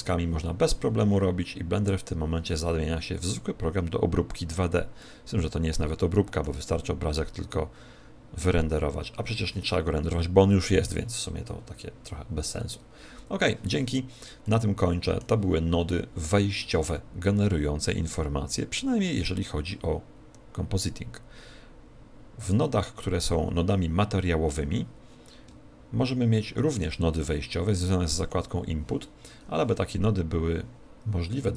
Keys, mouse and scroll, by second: 16.2 middle click.